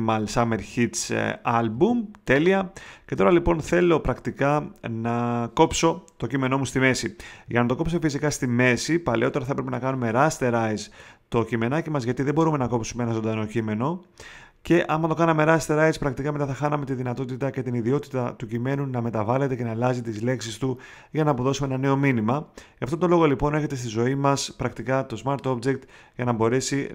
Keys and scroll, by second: 1.7 space.